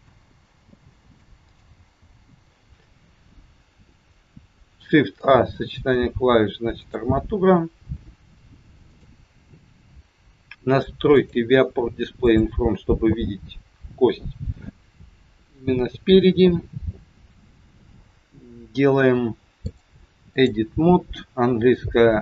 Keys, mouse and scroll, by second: 2.0 n, 4.9 shift+a, 8.9 click, 11.1 click, 12.2 click, 13.5 scroll down 2, 15.0 scroll down 1, 15.6 scroll down 1, 19.6 click.